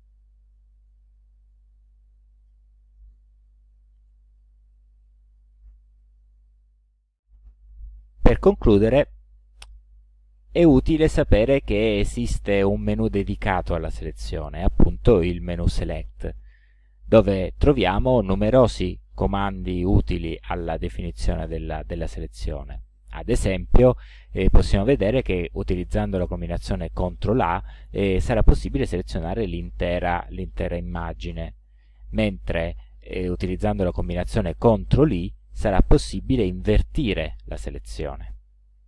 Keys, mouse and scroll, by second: 3.7 ctrl+z, 14.7 right click, 36.1 click.